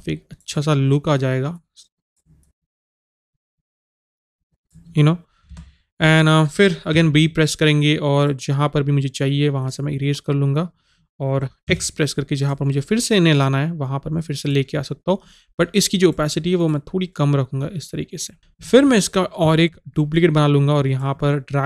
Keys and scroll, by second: 5.6 Return, 11.8 x.